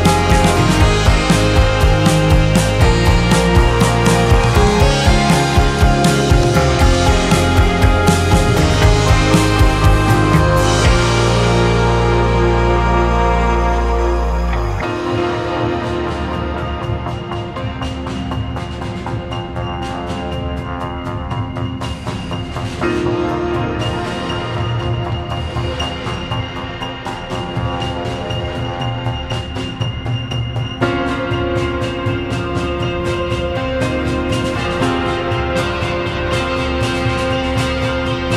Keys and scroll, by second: 0.2 KP_0, 1.0 Return, 1.5 F1, 2.1 2, 5.2 ctrl+h, 13.5 2, 17.9 space, 23.2 space, 31.4 space, 35.2 space.